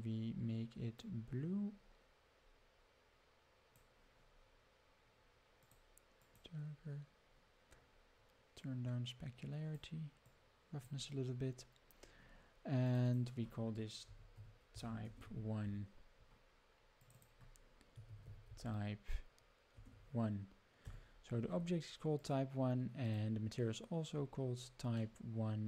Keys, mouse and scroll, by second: 5.6 click, 8.5 click, 10.2 click, 12.8 click, 13.1 click, 14.3-16.2 drag, 17.0-18.3 drag, 22.2 click, 23.0 click, 24.1 scroll down 4, 25.0-25.6 middle drag.